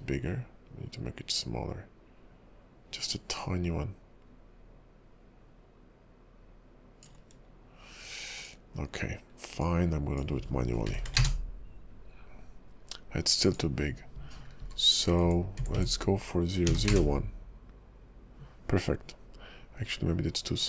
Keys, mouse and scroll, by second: 11.0 BackSpace, 15.2 BackSpace, 15.8 BackSpace.